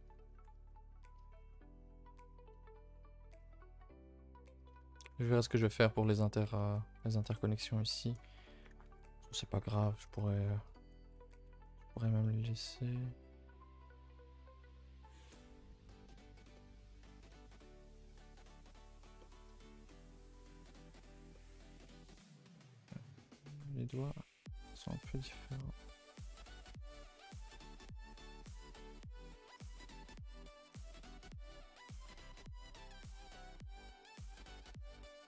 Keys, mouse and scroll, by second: 0.1 a, 0.2 a, 0.3-0.7 scroll down 1, 0.7-1.3 middle drag, 1.3 scroll down 1, 1.5-4.7 middle drag, 4.7 a, 4.9 a, 5.0-8.3 middle drag, 8.3 scroll down 1, 8.4 a, 8.5 a, 8.6-10.9 middle drag, 10.9 a, 11.0 a, 11.1-11.9 middle drag, 11.9-12.2 scroll up 3, 12.2-13.3 middle drag, 13.3-14.1 scroll up 4, 13.6 shift+middle drag, 14.1 Tab, 14.6 Tab, 14.8-15.3 middle drag, 15.3 a, 15.5 a, 15.6-16.0 scroll down 1, 16.0-16.4 middle drag, 16.4 scroll down 4, 16.5-17.1 middle drag, 17.1 scroll down 1, 17.3-18.5 middle drag, 18.5 KP_0, 19.2-20.6 shift+middle drag, 20.6-21.3 scroll down 1, 21.3 scroll down 1, 21.3-22.1 shift+middle drag, 22.1-22.5 scroll up 1, 22.5-26.7 shift+middle drag, 26.7 Tab, 26.9-27.2 scroll up 2, 27.2 Tab, 27.4 click, 27.5 Tab, 27.7 scroll up 2, 28.0 a, 28.1 a, 29.0 ctrl+z, 29.6 ctrl+z, 30.2 r, 32.0 r, 33.2 g.